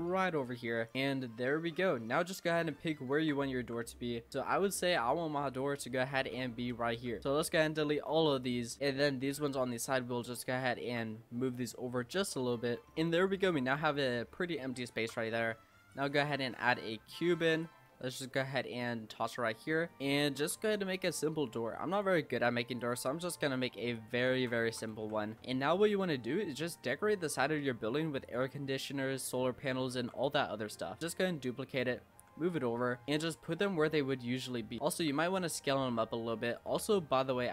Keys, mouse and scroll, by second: 1.0 Tab, 1.1-1.7 middle drag, 1.7-2.3 scroll up 2, 2.3-3.6 middle drag, 3.6 Tab, 3.8-4.2 scroll down 4, 4.2 scroll up 4, 4.5 scroll down 1, 4.7 scroll up 1, 4.9 middle click, 5.5 click, 6.0-8.1 typing, 8.8 Tab, 9.0 middle click, 9.3-10.2 scroll up 4, 10.2 Tab, 10.7 scroll up 1, 10.9 Tab, 11.7 click, 12.9 middle click, 13.5-13.9 scroll down 6, 13.9 middle click, 14.4-14.9 scroll up 3, 14.9 shift+a, 16.3 scroll up 2, 16.4 middle click, 16.6 scroll down 4, 16.9 middle click, 17.6 click, 18.8 click, 19.9-20.5 scroll up 3, 19.9 middle click, 20.5 s, 22.2 s, 23.0 s, 24.3 ctrl+z, 24.7 s, 25.3-27.0 shift+middle drag, 27.0-27.4 scroll up 4, 27.4 middle click, 28.2 click, 29.9 shift+d, 31.6-32.1 scroll down 1, 32.1 g, 33.0-34.8 shift+middle drag, 34.8 click, 34.9 Tab, 35.3 a, 35.8 s, 36.7 g.